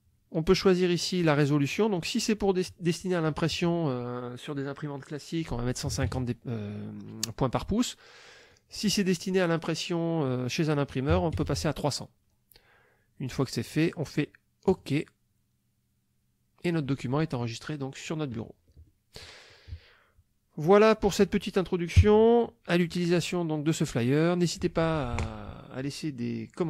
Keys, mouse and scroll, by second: 1.7 click, 2.4 click, 5.9 KP_1, 6.0 KP_5, 6.0 KP_0, 8.5 click, 11.1 KP_3, 11.4 KP_0, 13.7 click, 14.7 click, 18.9 click, 20.7 click, 22.0 KP_5.